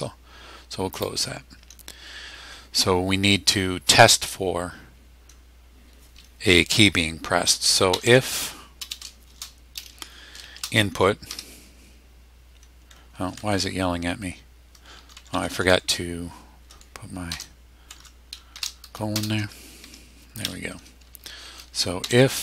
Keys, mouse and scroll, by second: 0.9 click, 7.7-9.3 typing, 10.5 shift+i, 11.3 n, 13.1 BackSpace, 14.7 BackSpace, 17.3 ;, 18.0 BackSpace, 18.5 shift+;, 19.2 Return, 19.8 Tab, 21.8-22.4 typing.